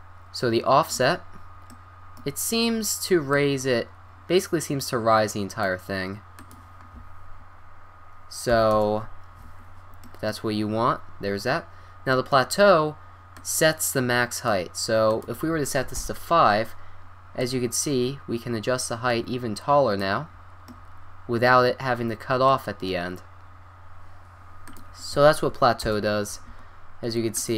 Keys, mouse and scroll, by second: 1.0-1.7 middle drag, 1.7-5.4 drag, 6.4-8.2 drag, 10.0 drag, 11.2 click, 13.3-14.3 drag, 16.6 click, 16.8 click, 17.4-19.2 drag, 20.6-23.6 middle drag, 24.7-26.4 drag, 27.3-27.5 drag.